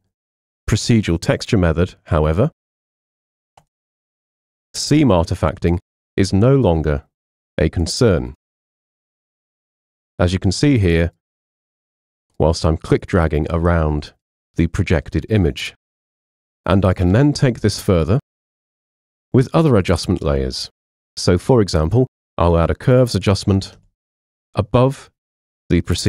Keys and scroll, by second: 23.8 super+m.